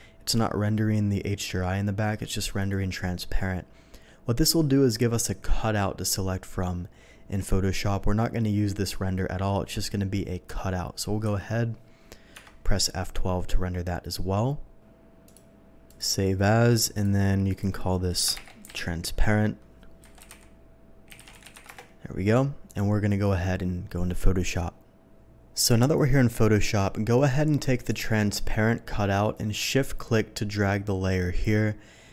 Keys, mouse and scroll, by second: 2.6 click, 11.3 z, 12.5 F12, 15.2 click, 15.9 click, 16.9 click, 17.5 click, 18.7 r, 20.1-21.5 typing, 21.6 Return, 22.7 click, 25.1 space, 27.8 click, 29.7-31.4 shift+drag.